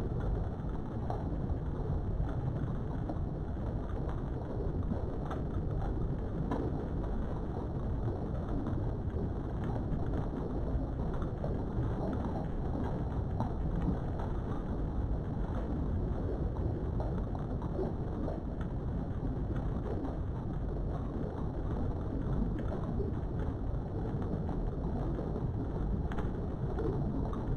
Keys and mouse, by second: 0.0 click, 0.4 g, 0.9 click, 1.5 click, 1.9 g, 2.6 click, 3.9 ctrl+r, 5.0 right click, 5.6 click, 6.3 g, 7.3 click, 10.0 click, 10.3 g, 11.4 click, 11.8 click, 12.3 g, 13.0 click, 13.5 click, 13.8 g, 16.2 click, 17.8 ctrl+r, 19.9 click, 20.6 click, 21.6 g, 22.3 click, 23.5 click, 25.4 right click, 25.4 g, 26.6 click, 26.8 g.